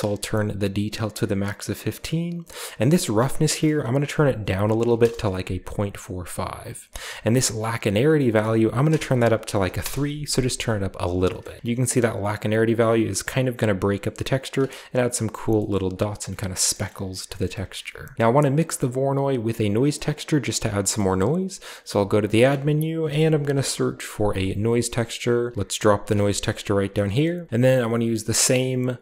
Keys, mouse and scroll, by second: 2.8 click, 2.9 click, 4.3-4.7 typing, 5.1 Return, 7.8 click, 8.1 click, 8.8-9.6 typing, 9.7 Return, 11.3 shift+middle click, 11.3-12.2 shift+scroll up 2, 12.2-14.4 shift+drag, 14.3 shift+right click, 15.7-16.2 shift+middle drag, 15.7-16.2 shift+scroll up 2, 16.2 shift+scroll down 2, 16.6 shift+middle click, 17.2-18.1 scroll down 4, 17.7 a, 18.1 click, 18.5 click, 21.0-21.6 middle drag, 21.0-21.9 scroll up 2, 21.7 typing, 22.3 click, 22.9-23.5 typing, 24.9 click, 25.5 typing, 25.9-27.5 drag, 26.2-27.2 scroll up 1, 27.2-28.0 typing, 27.7-28.6 scroll up 1.